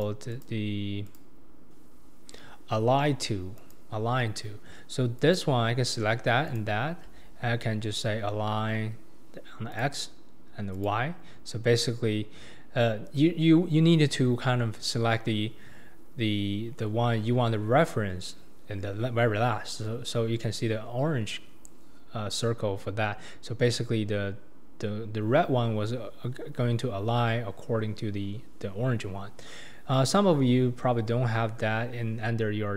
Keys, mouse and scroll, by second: 0.0-0.4 drag, 1.0 click, 3.6-5.3 drag, 6.5 shift+click, 9.7-13.8 drag.